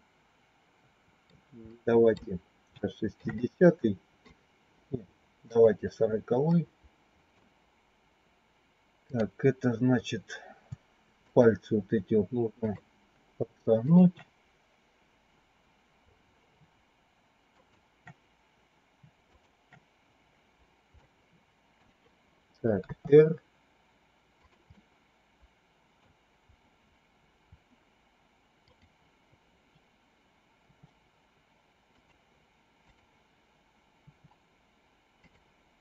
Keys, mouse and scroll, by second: 1.6 middle click, 2.7 shift+middle click, 3.3 middle click, 5.4 click, 6.4 middle click, 8.9 click, 12.4 shift+click, 13.7 shift+click, 17.5 shift+click, 19.2 shift+click, 20.9 middle click, 22.8 r, 24.7-25.9 middle drag, 30.4 r, 33.9 r.